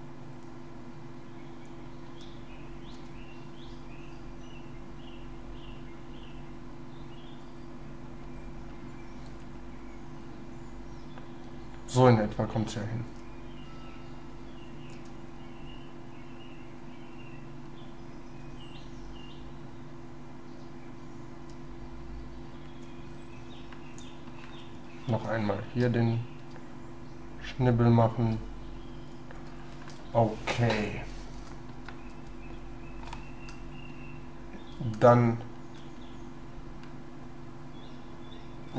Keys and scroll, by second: 25.2 shift+space.